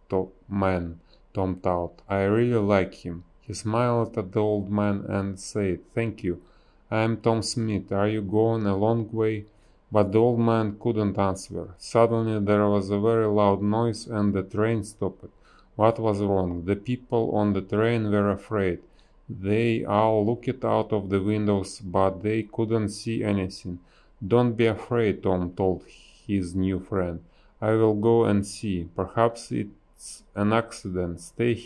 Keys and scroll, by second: 0.0-0.4 typing, 6.3 ctrl+z, 6.4 space, 9.2 a, 12.4 space, 14.8 space, 15.5 space, 16.0 space, 16.6 space, 18.3 space, 21.0 space, 22.7 space, 28.4 space, 29.4 b, 31.4 ctrl+z.